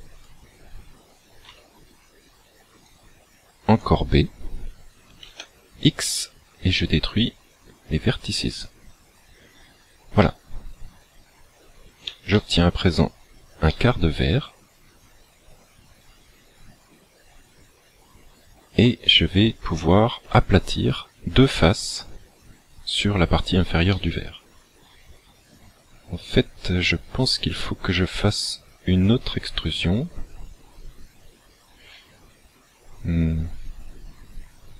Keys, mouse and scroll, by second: 1.5 b, 5.3 x, 10.3 middle click, 12.4 shift+middle click, 13.9 middle click, 24.0 middle click.